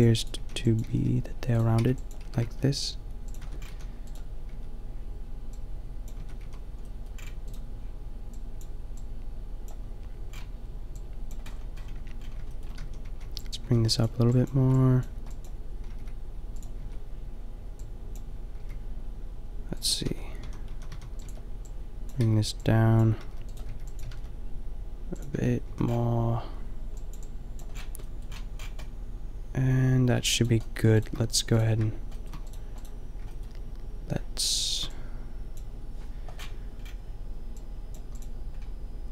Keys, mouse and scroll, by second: 0.0-2.3 typing, 3.4 Tab, 3.7 a, 4.1-5.3 middle drag, 4.5 Tab, 6.2 Tab, 6.4 a, 8.4 click, 12.0 Tab, 12.9-15.9 typing, 16.8 Tab, 18.6 g, 20.1 Tab, 20.5-24.3 typing, 25.4 Tab, 25.6 a, 30.4-32.2 middle drag, 37.7 click, 38.2 drag, 38.6 click.